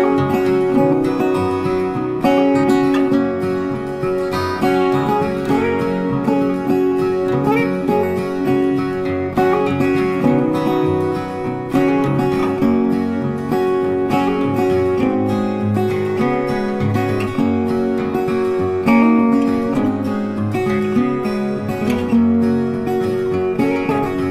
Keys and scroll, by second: 10.0 ctrl+8, 10.6 ctrl+z, 12.1 ctrl+8, 14.0 ctrl+8.